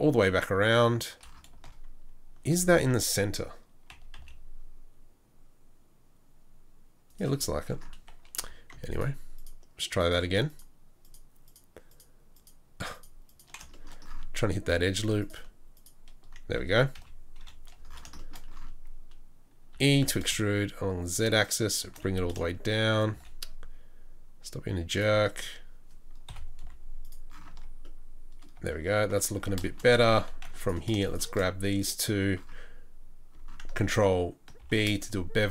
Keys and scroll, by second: 4.2 s, 8.4 3, 16.9 KP_3, 17.4 KP_1, 19.7 e, 26.3 KP_7, 26.6 z, 27.5 Tab, 29.4 Tab, 30.1 2, 34.6 ctrl+b.